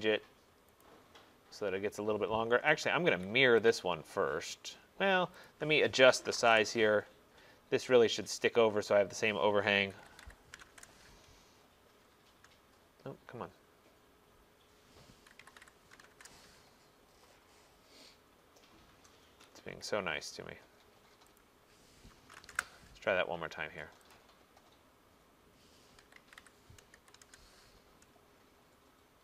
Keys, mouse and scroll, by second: 0.9 click, 3.2 Escape, 3.8 click, 5.5 click, 6.2-6.5 typing, 8.4 click, 8.5-11.2 typing, 13.4 middle click, 13.4 middle click, 13.9 middle click, 14.0 middle click, 15.4-16.1 typing, 16.2 Return, 18.8 middle click, 19.0 middle click, 19.3 Escape, 19.7 Escape, 20.1 middle click, 20.7 middle click, 21.2 middle click, 21.4 click, 22.3-22.6 typing, 24.2 click, 25.8-27.7 typing.